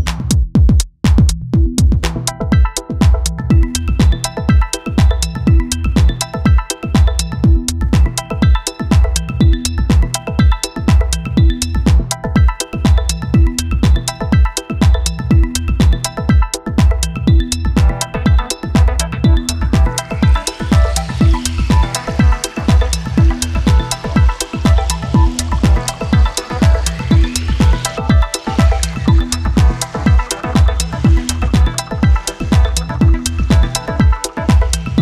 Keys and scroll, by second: 23.1 space, 28.6 p, 29.2 space.